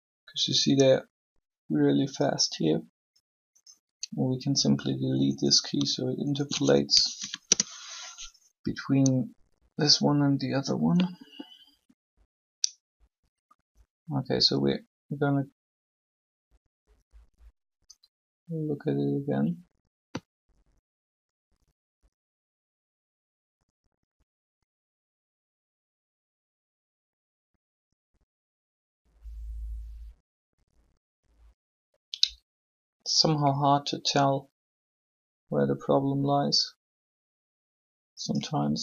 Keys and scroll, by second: 6.9 shift+Delete, 7.2 Return.